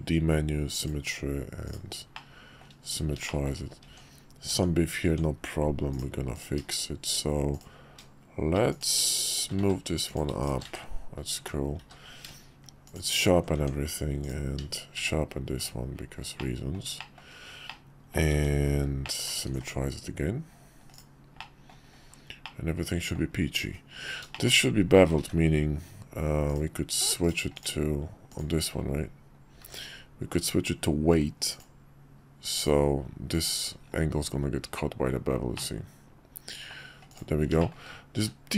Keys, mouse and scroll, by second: 1.7 click, 2.2-2.7 middle drag, 3.3 shift+middle drag, 3.9 Tab, 5.9 click, 6.7 shift+click, 7.5 click, 8.7 click, 9.3 shift+click, 9.6 1, 10.1 click, 10.4 shift+click, 10.7 1, 11.4 Tab, 11.8 q, 13.6 Tab, 14.2 click, 15.0 q, 16.4 middle click, 17.0 shift+middle click, 17.6 middle click, 18.3 Tab, 19.0 drag, 19.5 alt+x, 20.9-21.3 drag, 21.4-21.7 drag, 22.4-23.2 drag, 24.3 shift+drag, 25.2 ctrl+`, 28.3 click, 28.8 middle click, 29.6 ctrl+`, 35.5-36.7 middle drag, 37.6 shift+middle drag, 38.1 q.